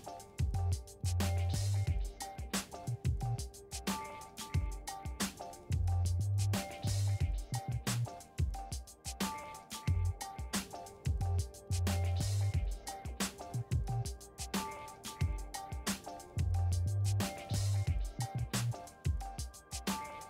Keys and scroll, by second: 13.7-14.7 typing, 14.8 Return.